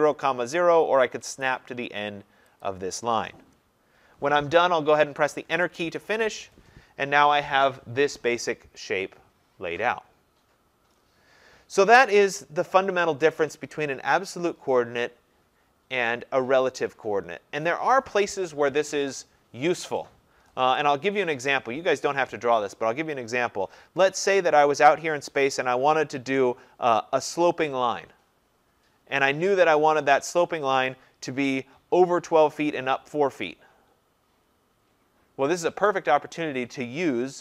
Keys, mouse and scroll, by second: 2.7 click, 5.5 Return, 8.7 Return, 22.8 click, 24.5 click.